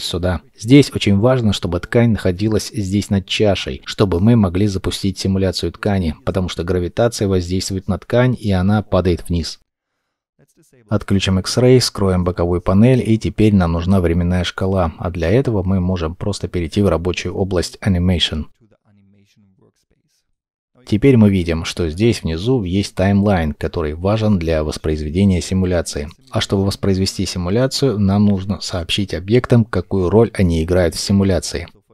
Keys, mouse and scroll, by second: 12.1 n, 25.0 middle click, 25.7-26.1 scroll, 26.1-26.9 scroll up 1, 26.9 shift+middle click.